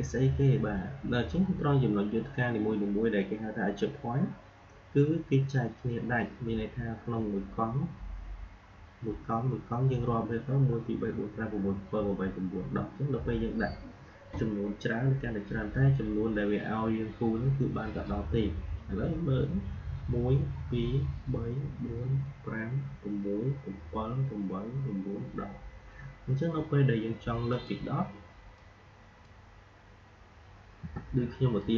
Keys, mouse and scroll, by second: 27.4-30.7 drag, 30.7 Delete, 31.5 click.